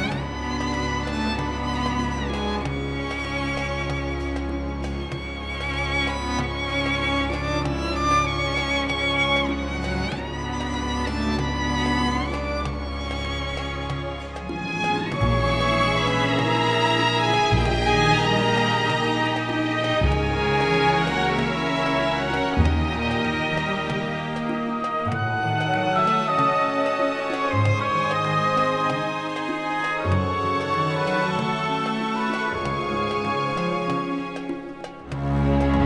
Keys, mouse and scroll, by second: 3.0-7.3 drag, 9.1 right click, 11.4 click, 12.6 ctrl+scroll down 1, 13.3 space, 14.8-16.6 drag, 16.6 Delete, 17.4-25.5 drag, 25.5 click, 26.6 space, 26.7 click, 27.1 space, 27.4 ctrl+scroll up 1, 28.2 ctrl+scroll down 1, 28.7 space, 29.1 click, 29.2 space.